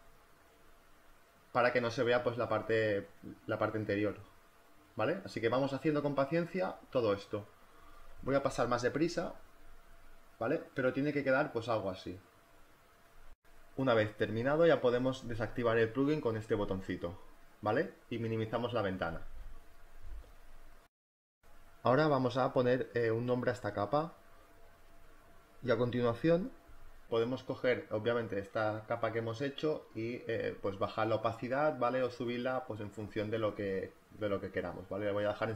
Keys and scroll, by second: 12.0 z, 13.8 b, 17.3 space, 22.9-25.1 typing, 27.2 space.